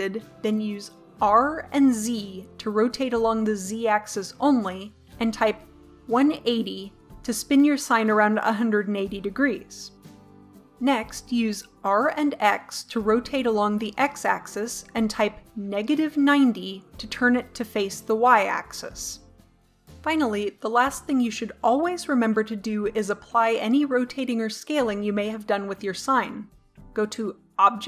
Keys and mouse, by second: 1.3 r, 9.7-10.3 drag, 10.3 middle click, 10.9 r, 17.7-21.8 middle drag.